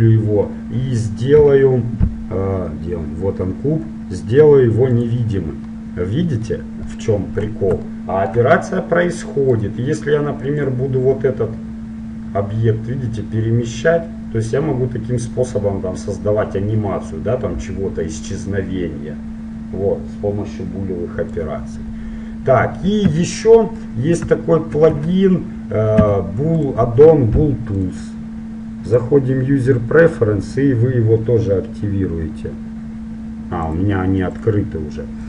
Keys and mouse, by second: 1.5 KP_Decimal, 5.0-7.0 drag, 5.8-10.7 middle drag, 9.7-11.5 right drag, 10.7-12.5 drag, 10.9 middle click, 21.7-26.1 middle drag, 23.3 a, 25.1 a, 26.1 x, 27.9-29.9 drag.